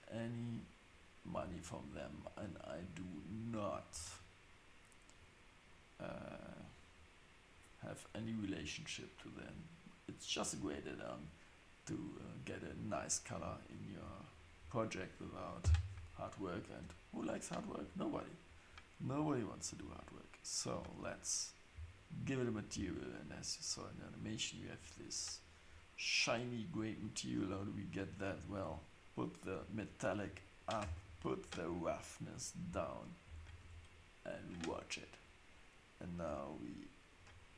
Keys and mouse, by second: 3.4-10.4 drag, 14.3 click, 15.6 n, 19.6 click, 20.7 click, 26.8-28.4 drag, 30.6-32.6 drag, 33.2 Tab, 33.6 Tab, 36.5 click.